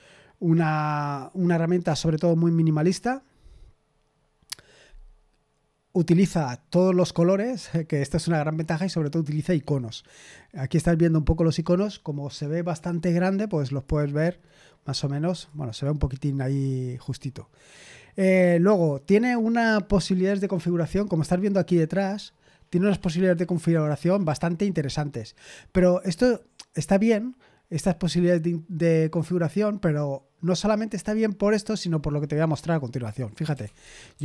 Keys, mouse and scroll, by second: 11.4-33.4 drag, 33.1-34.2 typing.